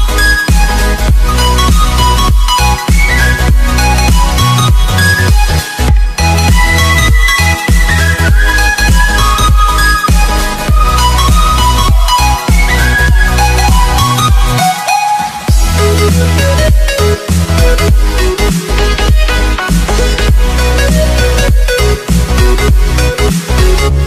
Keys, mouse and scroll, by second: 0.3 t, 1.2 click, 4.3 Return, 5.7 s, 7.0 click, 10.7 click, 14.3 ctrl+s, 16.3 ctrl+shift+s, 18.0 click.